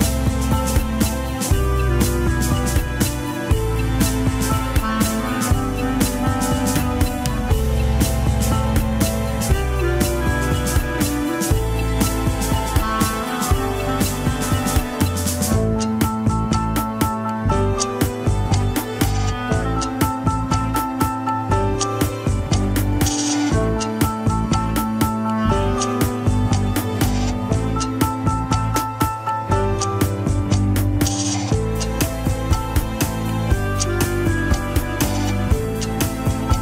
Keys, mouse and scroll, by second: 0.0 scroll down 2, 0.4 shift+middle click, 0.6 shift+scroll down 1, 1.3 ctrl+Tab, 1.4 scroll up 1, 1.7 shift+click, 2.1 ctrl+Tab, 2.6 scroll up 1, 3.1 ctrl+Tab, 3.7 click, 3.9 KP_3, 4.0 scroll up 1, 4.6 ctrl+Tab, 5.1 alt+z, 5.6 click, 6.3 alt+z, 6.8 g, 8.7 KP_1, 8.9 scroll up 1, 9.5 g, 11.7 alt+z, 12.5 click, 12.8 alt+z, 13.2 g, 15.2-15.6 scroll down 4, 16.3 click, 17.1 scroll down 2, 17.7 r, 20.3 click, 21.2 r, 24.3-24.9 scroll up 2, 24.9 click, 25.6 r, 27.9 scroll up 1, 28.3 r, 32.3 KP_1, 32.7 scroll down 2, 33.0 shift+middle click, 33.3 KP_3, 33.5-33.9 scroll down 1, 33.9 r.